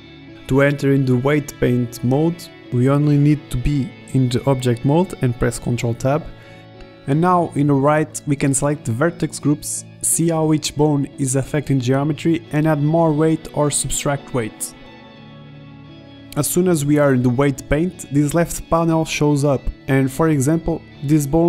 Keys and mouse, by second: 8.0 ctrl+Tab, 14.0-15.3 middle drag, 16.0-16.6 middle drag, 19.9 click, 20.8-21.4 middle drag.